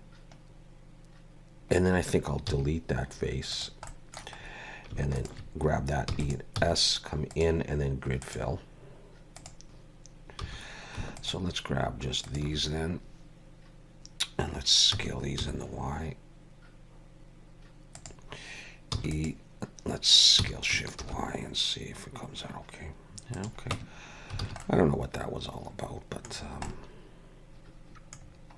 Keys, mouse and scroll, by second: 2.5 x, 3.9 middle click, 4.5-4.9 scroll up 1, 5.2 alt+shift+click, 6.1 e, 6.6 s, 8.2 click, 9.6 alt+a, 9.6 middle click, 9.6-10.5 scroll up 2, 10.5 3, 11.2 alt+shift+click, 15.0 s, 19.0 e, 20.4 s, 23.8 Tab, 24.1 scroll down 2, 24.5 alt+a, 24.6 middle click, 26.4 scroll down 3, 26.7 middle click, 28.3-28.5 scroll down 6.